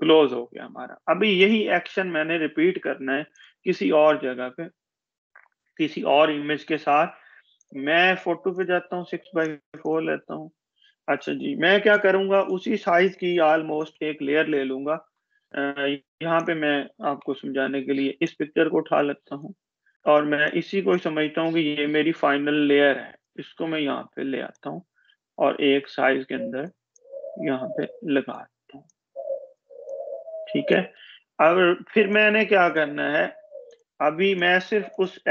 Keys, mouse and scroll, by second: 4.4 click, 8.4 click, 15.5 click, 19.4 ctrl+-, 20.4 ctrl+=, 22.3 alt+d, 23.4 Escape, 23.6 click, 24.5 super+d, 25.9 click, 26.5-29.1 alt+Tab, 30.0-32.0 drag.